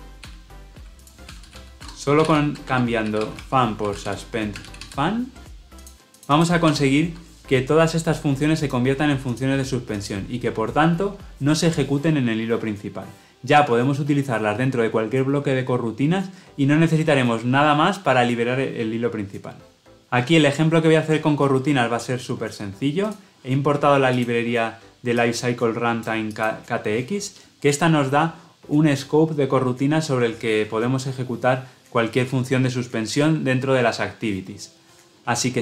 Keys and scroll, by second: 0.3 ctrl+r.